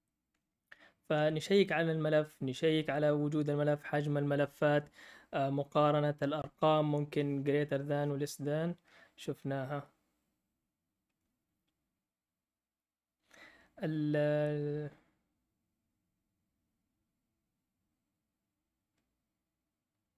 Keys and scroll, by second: 1.1 typing.